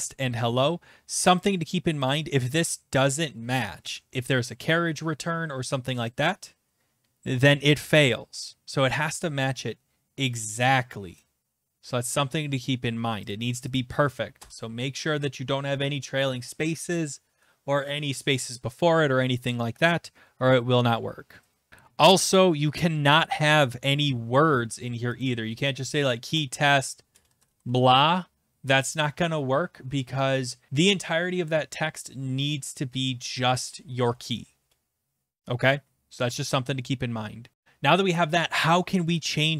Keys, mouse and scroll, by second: 1.4 click, 2.1 click, 4.1 Return, 6.0 click, 13.3 click, 13.7 click, 14.4 BackSpace, 21.7 click, 21.7 BackSpace, 25.2 click, 26.7-28.1 typing, 30.0-30.8 typing, 33.5-34.5 typing, 37.5 click.